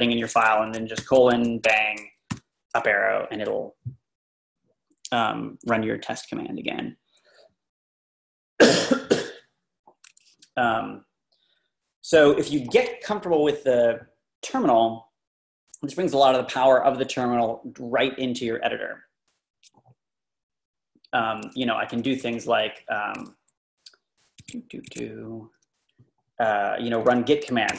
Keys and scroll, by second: 2.3 Up, 21.9-22.6 typing, 24.4 Escape, 24.9 Escape.